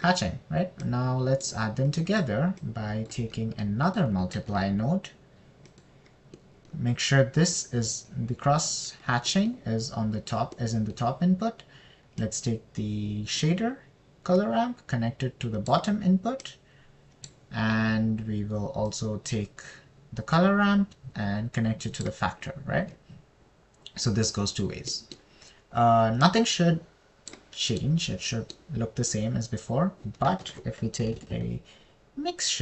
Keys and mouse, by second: 0.7 click, 2.3 click, 3.3 click, 4.0 click, 5.3 click, 5.8 shift+d, 7.8 click, 12.0 click, 13.6 middle click, 17.9 middle click, 20.3 middle click, 29.3 click, 31.9 shift+a.